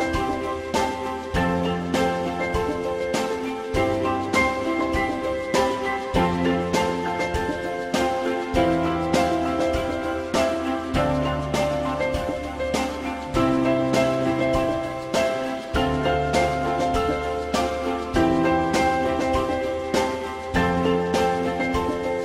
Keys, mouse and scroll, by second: 4.2 ctrl+z, 4.8 ctrl+click, 5.1 ctrl+click, 5.3 ctrl+double click, 6.0 ctrl+double click, 6.2 ctrl+click, 9.1 ctrl+z, 10.8 ctrl+Return, 11.2 ctrl+click, 12.3 alt+middle click, 16.3 alt+middle click.